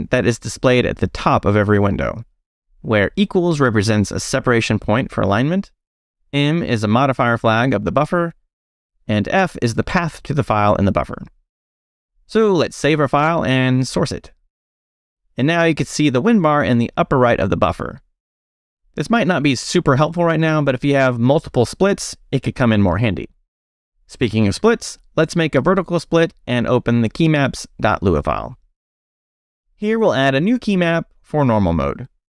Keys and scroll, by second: 0.0-1.0 typing, 2.4 shift+', 3.2 shift+Left, 5.5-10.3 typing, 10.4 Escape, 12.3 Escape, 12.4-14.7 typing, 14.9 shift+Return, 15.7 Return, 24.2 space, 24.5 shift+\, 26.5-32.0 typing, 28.6 Return.